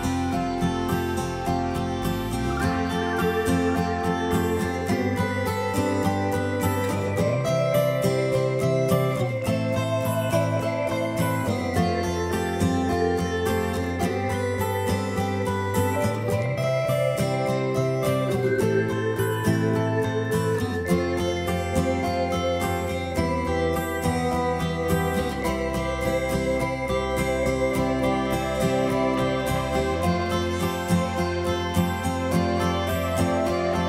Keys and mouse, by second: 0.0 click.